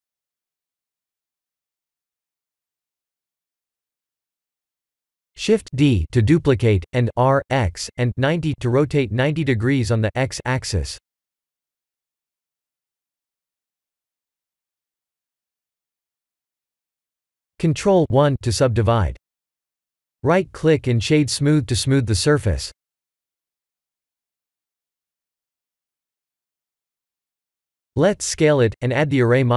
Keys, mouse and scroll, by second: 3.0 KP_7, 3.7 KP_1, 4.5 shift+z, 5.0 shift+middle click, 5.7 shift+d, 9.1 r, 11.3 middle click, 11.9 middle click, 12.1 shift+z, 14.1 click, 15.2 click, 15.6 g, 17.9 click, 19.0 ctrl+1, 19.6 click, 19.9 ctrl+1, 20.4 right click, 20.9 right click, 22.0 click, 22.3 right click, 23.7 click, 24.1 middle click, 25.1 click, 25.7 shift+click, 26.7 ctrl+j, 27.4 click, 28.7 shift+l, 29.1 s.